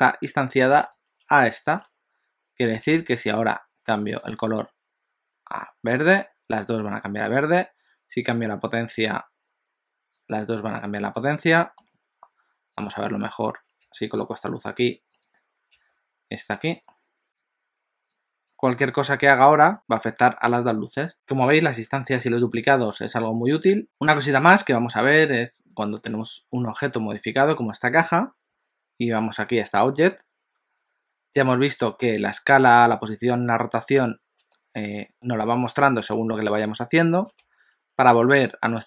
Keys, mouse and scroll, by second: 4.4 click, 10.3 click, 11.6 middle click, 13.0 click, 13.8 g, 15.2 click, 15.7 g, 17.2 click, 17.3 click, 26.7 click, 30.2 click.